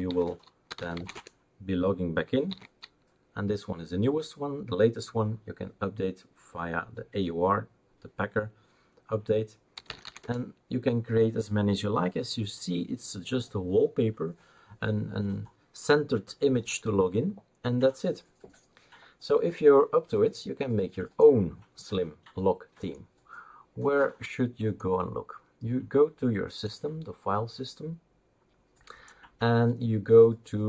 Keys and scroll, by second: 0.0 super+l, 1.1 super+l, 1.1 Return, 1.1 typing, 2.5 super+l, 9.5-10.5 typing.